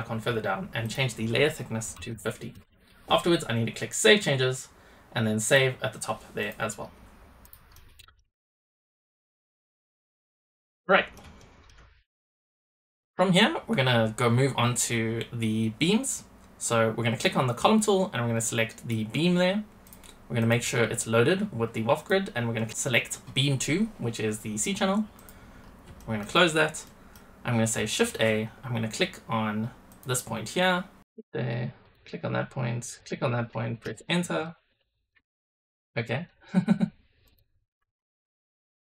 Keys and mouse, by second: 3.9-6.4 drag, 7.3 middle click, 7.7-8.1 middle drag, 8.6 shift+middle click, 9.3-9.7 middle drag, 10.8 middle drag, 11.3 shift+middle drag, 12.4 middle click, 16.1-18.8 middle drag, 19.8 middle drag, 20.3-25.3 middle drag, 25.9 shift+middle click, 26.8 middle click, 27.9-33.8 shift+drag, 27.9 shift+a, 31.0 shift+a, 34.3 middle drag, 34.5-35.0 middle drag, 35.3-35.8 shift+middle drag, 35.9 middle click, 37.3 click, 38.3 KP_0.